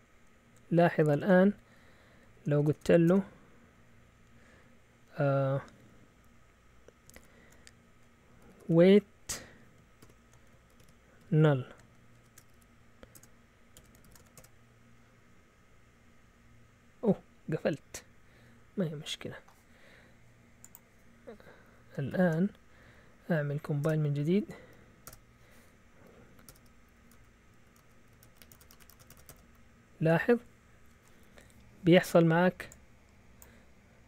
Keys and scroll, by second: 2.7-3.1 typing, 7.2-14.5 typing, 13.7 Escape, 22.1 ctrl+l, 22.8 Up, 23.1 Up, 23.8 Return, 24.2 Up, 24.4 Up, 25.0 Return, 26.2 Up, 26.5 Return, 27.0 Up, 27.1 Return, 27.6 Up, 27.7 Return, 28.4 Up, 28.5 Return, 28.6-29.4 typing, 29.4 Up.